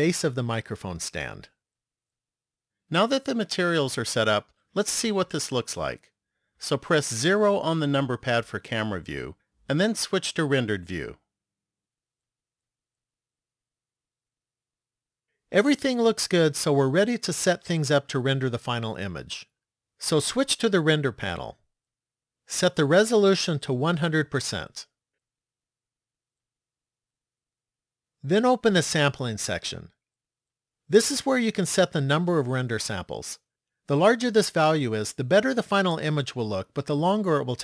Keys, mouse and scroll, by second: 7.2 KP_0, 9.5 click, 21.5 click, 23.5 click, 26.5 click, 29.3 click.